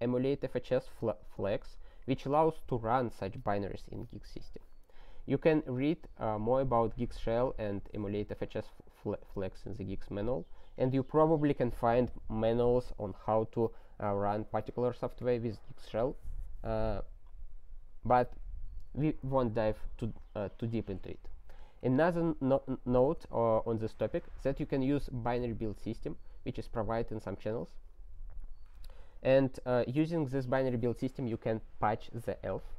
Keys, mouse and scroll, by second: 21.5 click, 21.9 ctrl+space, 22.1 ctrl+a, 23.0 ctrl+g.